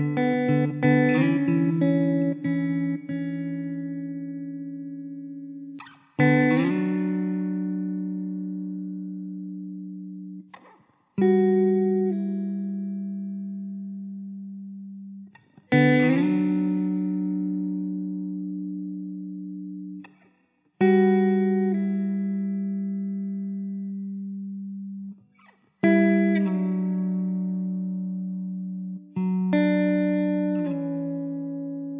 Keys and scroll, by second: 1.3 shift+d, 6.0 r, 6.9 Tab, 8.4 l, 9.5 alt+z, 10.6 Delete, 12.4 Tab, 13.1 alt+z, 23.7 alt+z, 23.8 Tab, 24.3 alt+z, 24.9 Tab, 26.5 s, 29.0 alt+z, 30.4 r.